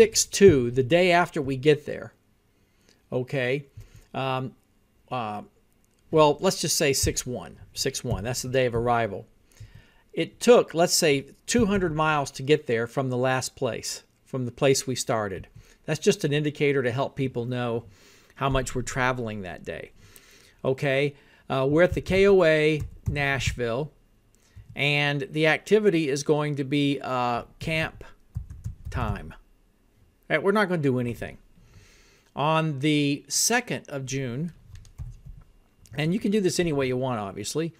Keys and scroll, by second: 0.0-1.0 typing, 3.8 Tab, 7.1 Left, 7.9-8.8 typing, 9.7 Tab, 11.3-12.4 typing, 15.5 Tab, 21.7-24.2 typing, 24.6 Tab, 27.4-29.6 typing, 35.1-35.8 typing, 35.9 Tab.